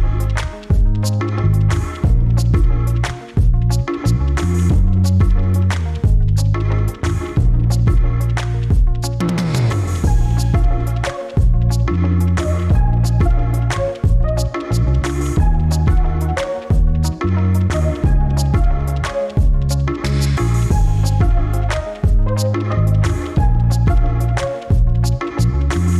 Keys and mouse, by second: 0.4-3.0 drag, 4.4 middle click, 5.5 click, 7.8-11.2 middle drag, 16.1-16.6 shift+middle drag, 16.8-17.5 middle drag, 18.5 middle click, 19.7 click, 24.0 click, 24.6 click, 25.2-25.6 middle drag.